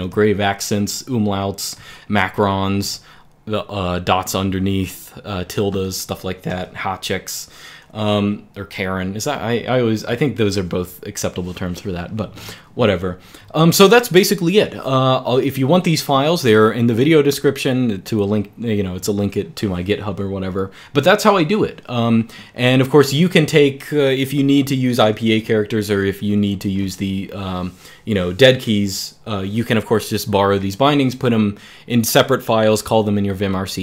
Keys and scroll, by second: 1.5-4.4 typing, 6.4 {.